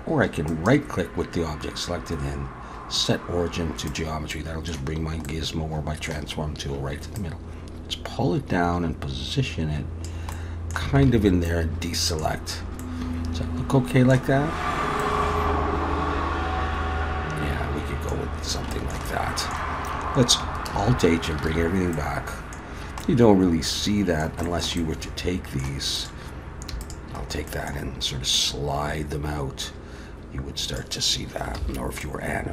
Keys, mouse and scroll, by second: 0.5 right click, 4.3 middle click, 5.3 middle click, 7.2 click, 10.3 middle click, 11.0 alt+a, 11.5 middle click, 12.5-13.3 scroll down 2, 12.8 middle click, 14.4-15.0 scroll up 3, 15.0 middle click, 18.3-18.7 scroll down 2, 18.7 shift+middle click, 19.1 middle click, 20.8 alt+h, 21.5 alt+a, 21.9 middle click, 22.7-23.8 scroll down 2, 23.0 middle click, 24.5 shift+middle click, 24.8 middle click, 26.0 click, 26.8 shift+click, 27.2-27.8 scroll down 2, 27.5 middle click, 28.4 click, 31.6 ctrl+z, 32.0 middle click.